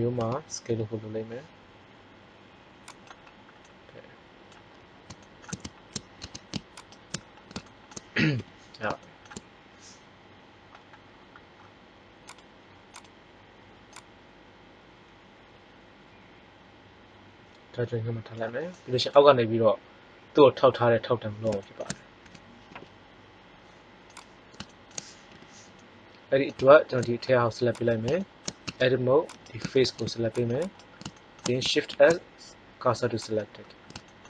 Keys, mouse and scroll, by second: 0.1 s, 3.0 click, 3.5-5.3 middle drag, 6.1 Tab, 6.7-7.5 right drag, 8.2 KP_3, 12.2-13.1 drag, 18.7-20.0 middle drag, 22.1 s, 24.1-25.4 drag, 25.2 KP_3, 28.5 Tab, 29.7 ctrl+Tab, 31.8 shift+s.